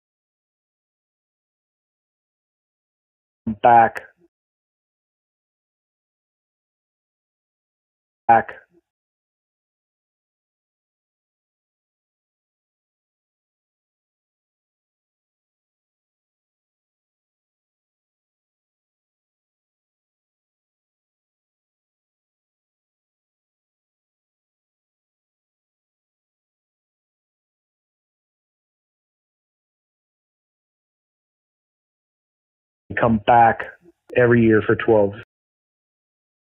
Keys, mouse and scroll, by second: 0.2 click, 0.4 click, 1.5 click, 1.7 click, 3.1 click, 3.4 space, 4.2 space, 5.5-6.6 shift+drag, 8.1 click, 8.2 space, 8.8 space, 10.1 click, 10.3 click, 11.5 ctrl+s, 12.1 space, 32.7 click, 32.8 space, 34.6 click, 35.1 space, 35.5 click.